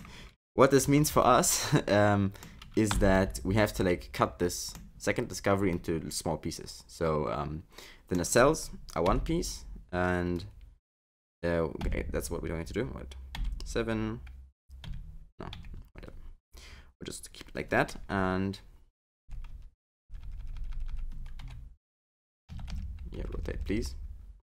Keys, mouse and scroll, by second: 0.8 alt+z, 1.2 middle click, 3.1 3, 3.3 middle click, 5.7 middle click, 9.1 KP_7, 11.8 KP_6, 13.3 KP_7, 14.9 KP_9, 15.5 KP_9, 16.6 scroll up 3, 17.4-18.1 scroll down 1, 18.1 KP_8, 19.2-21.4 typing, 22.5-23.7 typing.